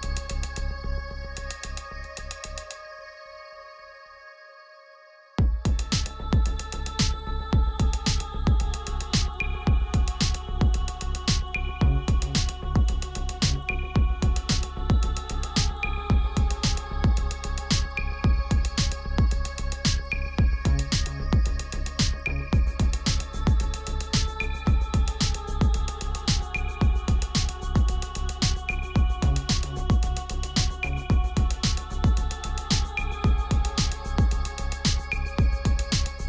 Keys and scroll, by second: 27.4 c.